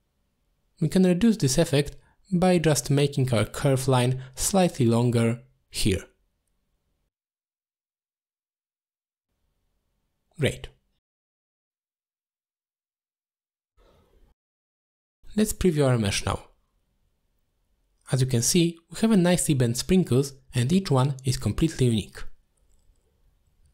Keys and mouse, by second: 0.3 click, 0.7 click, 1.3 middle click, 3.8 middle click, 4.1 middle click, 4.4 middle click, 6.3 shift+click, 7.3 ctrl+z, 7.9-9.8 drag, 11.0 middle click, 11.5 middle click, 12.8 middle click, 14.5 middle click, 15.9 alt+shift+click, 16.7 middle drag, 17.4-17.9 middle drag, 19.3 middle drag, 20.4-20.8 middle drag, 21.5-21.9 middle drag, 22.4 middle drag, 22.8 shift+middle drag, 23.6 middle click.